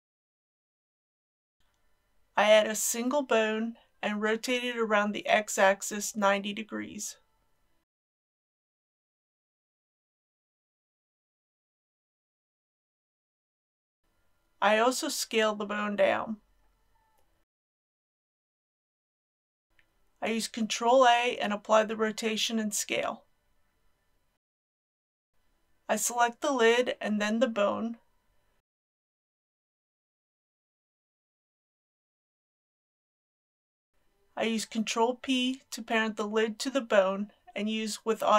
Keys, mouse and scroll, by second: 0.4 scroll down 1, 2.2-3.6 middle drag, 4.2 shift+a, 7.5 click, 8.7 KP_3, 9.5 scroll down 1, 9.8 shift+middle click, 10.8 shift+r, 10.9 shift+x, 11.8 KP_9, 11.9 KP_0, 13.1 a, 13.7 click, 15.1 s, 18.2 click, 20.8 ctrl+a, 22.3 click, 23.2 ctrl+a, 24.2 click, 30.0 shift+click, 35.1 ctrl+p.